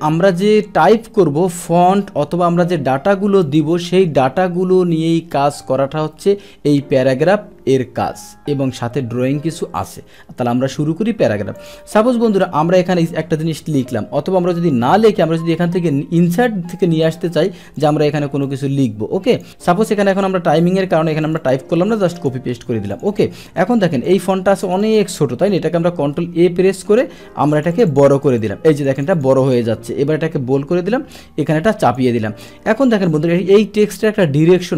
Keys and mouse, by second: 3.4 click, 11.6 click, 12.4 click, 14.9 ctrl+z, 17.8 click, 18.4-19.4 drag, 20.1 click, 21.2 click, 21.4 click, 21.9 ctrl+v, 22.2 click, 22.9 click, 23.1 click, 24.1 click, 24.2 click, 24.7 click, 24.8 click, 25.9 ctrl+a, 27.5 click, 27.7 click, 27.9 click, 28.1 click, 28.2 click, 28.4 click, 28.8 click, 29.0 click, 29.1 click, 29.3 click, 29.5 click, 31.2 click, 34.2 click.